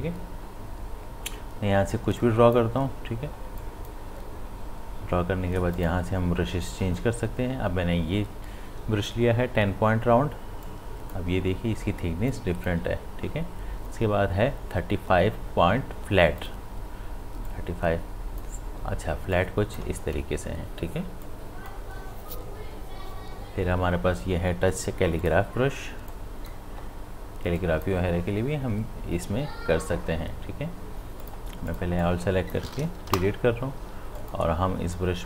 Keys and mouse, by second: 2.2-3.6 drag, 10.6-15.9 drag, 16.4-24.1 drag, 25.2-27.6 drag, 31.2-34.2 drag.